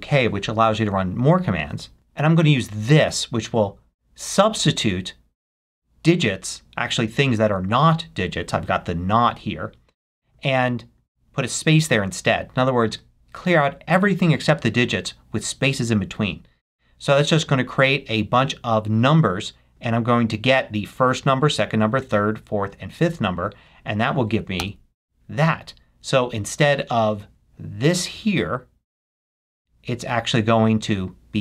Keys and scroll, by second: 1.9 super+v, 24.6 Return.